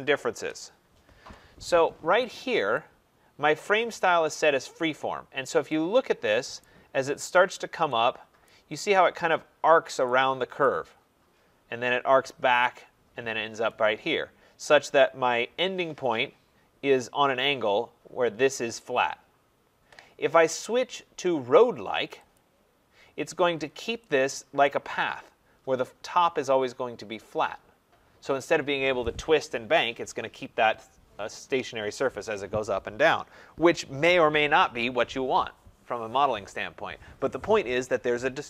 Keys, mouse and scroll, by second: 0.2 Return, 2.8 click, 5.2 middle click, 5.3 middle click, 5.4 middle click, 6.6 right click, 7.8 scroll, 8.4 right click, 10.6 right click, 10.9 scroll, 14.8 right click, 15.4 middle click, 15.5 middle click, 22.3 click, 23.6 middle click, 23.7 middle click, 23.7 middle click, 24.6 right click, 25.1 middle click, 25.1 middle click, 25.2 middle click.